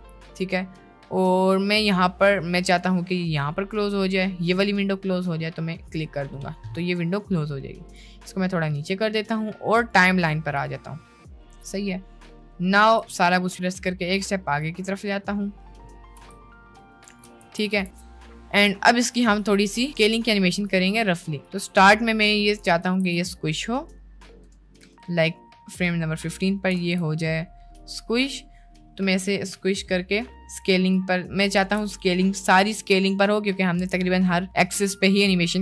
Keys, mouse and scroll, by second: 7.9 click, 11.2 middle click, 11.8 click, 13.0 a, 13.0 x, 13.5 g, 15.4 middle click, 15.9 middle click, 16.2 space, 17.1 space, 17.4 ctrl+z, 17.7 ctrl+z, 18.0 ctrl+z, 19.6 shift+middle click, 20.2-20.6 shift+middle drag, 21.4 click, 22.8 a, 23.1 x, 23.8 click, 24.4 space, 25.0 space, 26.8 s, 30.9 click, 31.8 ctrl+z.